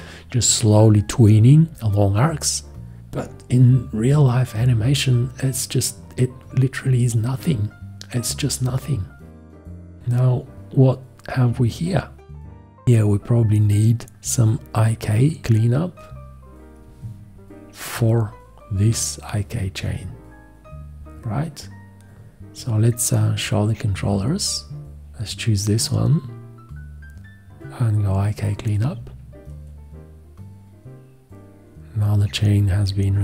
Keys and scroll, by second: 23.1 F1.